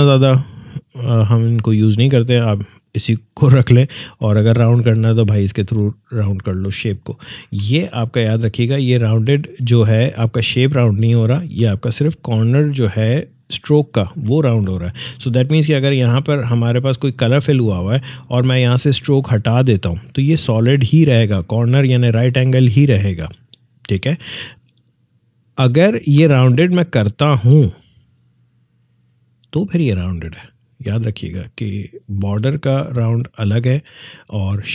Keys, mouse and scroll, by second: 2.8-7.3 drag, 7.3 ctrl+z, 8.7 click, 15.7 click, 27.4-30.6 drag.